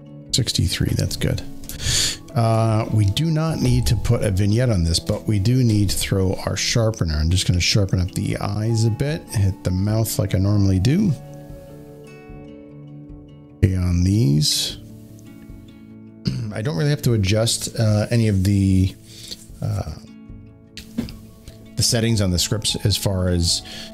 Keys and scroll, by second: 1.6 space.